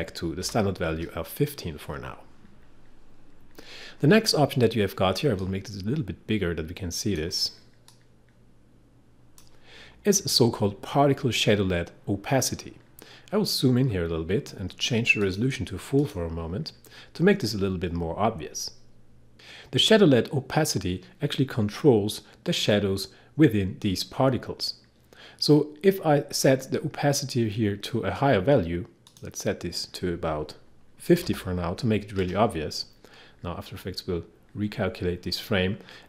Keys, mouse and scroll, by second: 0.0-0.5 typing, 5.1-5.9 typing, 5.6-11.9 drag, 13.6 scroll up 1, 15.2 click, 29.1 click, 31.2 typing, 32.4 typing.